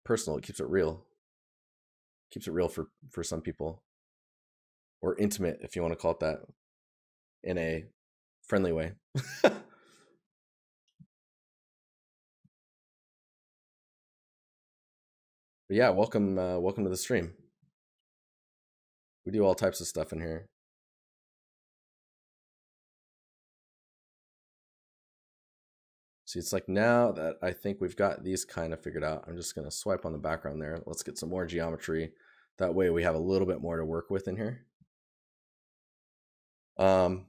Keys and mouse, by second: 1.5 right click, 8.5 right click, 11.8 right click, 14.1 right click, 22.6 right click, 25.6 right click, 30.7 right click.